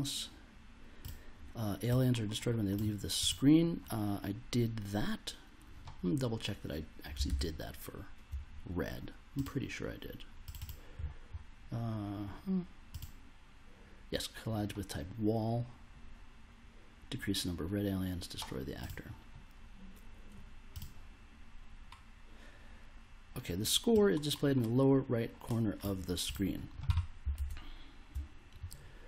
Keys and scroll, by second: 7.3 super+Tab, 27.3 super+Tab.